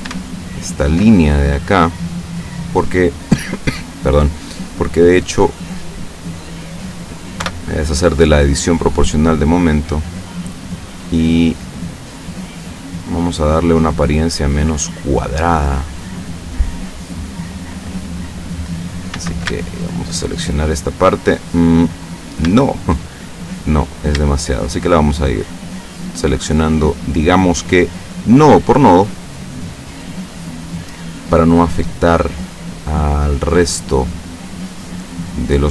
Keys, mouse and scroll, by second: 0.5 alt+shift+right click, 1.2-1.9 alt+shift+scroll down 4, 1.9-5.1 middle drag, 5.1-5.6 scroll up 2, 6.4 click, 7.5 o, 8.9-11.1 drag, 12.3-13.8 drag, 13.8-16.5 middle drag, 16.6-17.7 drag, 18.5 click, 19.1 a, 19.9 alt+shift+right click, 22.5 a, 24.0 shift+right click, 24.6 shift+right click, 25.5 shift+right click, 26.0 shift+right click, 26.6 shift+right click, 27.3 shift+right click, 27.7 shift+right click, 28.6 shift+right click, 29.1 shift+right click, 29.9 shift+right click, 30.7 shift+right click, 31.6 shift+right click, 32.0-33.2 shift+middle drag, 33.6 shift+right click, 34.5 shift+right click, 35.4 shift+right click.